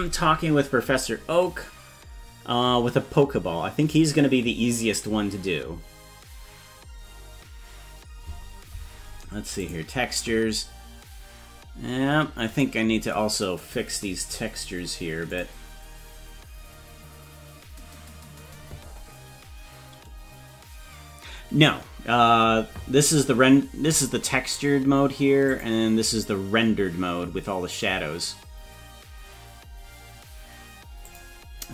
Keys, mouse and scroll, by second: 9.9 click, 12.6 right click, 15.3 click, 25.5 click, 31.1 click.